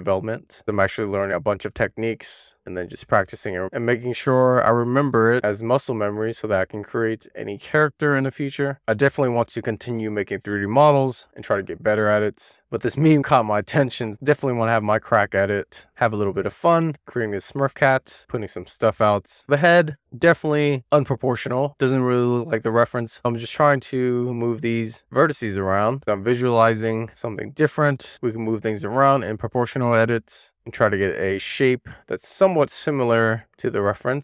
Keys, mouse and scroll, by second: 0.8 click, 1.1 click, 1.8 super+z, 2.1 middle click, 2.9 click, 3.4 super+z, 3.7 click, 4.3 super+z, 4.6 click, 4.8 click, 6.9 super+z, 7.0 click, 9.4 super+z, 10.1 super+z, 10.2 click, 11.3 super+z, 11.5 click, 14.2 middle click, 15.0 middle click, 15.5-16.1 scroll down 2, 15.7 middle click, 16.1 middle click, 16.9 scroll down 2, 17.1 middle click, 17.5 /, 17.8 scroll down 1, 18.0 middle click, 18.5 scroll down 1, 18.6 shift+middle click, 19.1-19.4 scroll up 1, 19.7 middle click, 20.4 click, 21.5 middle click, 21.9 super+z, 23.4 click, 24.1-24.8 scroll down 1, 24.8 super+z, 25.2 click, 26.1-26.6 scroll up 3, 26.6-28.8 scroll down 12, 29.0 middle click, 29.4 scroll up 1, 29.6 click, 30.1-30.5 scroll up 2, 30.5 middle click, 31.2 super+z, 31.4 click, 32.1 alt+z, 32.4 alt+middle click, 32.6 scroll up 4, 32.8 click.